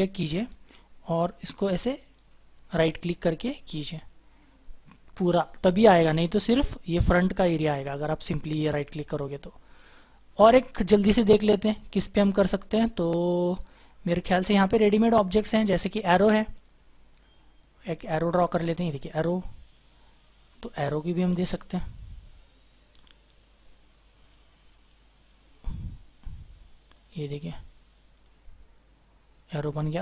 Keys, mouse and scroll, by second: 1.9 right click, 7.9 right click, 8.8 Delete, 9.2-10.2 scroll down 1, 10.2 scroll up 1, 11.2 scroll down 1, 22.7-25.7 scroll up 1.